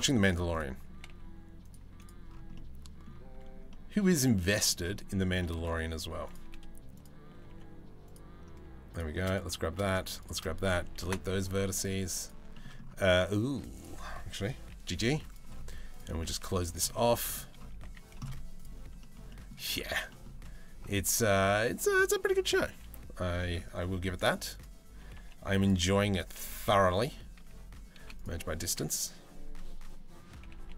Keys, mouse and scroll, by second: 0.5 g, 1.4 z, 2.1 middle click, 2.9 3, 3.3 middle click, 5.1 middle click, 5.7 1, 5.8 click, 6.9 g, 10.6 Delete, 11.8 middle click, 12.1 shift+middle click, 13.3 click, 14.3 g, 15.7 g, 16.5 middle click, 17.4 z, 18.6 shift+middle click, 19.5 a, 19.7 middle click, 24.1 click, 24.6 g, 25.9 g, 26.9 a, 27.6 m, 30.0 g.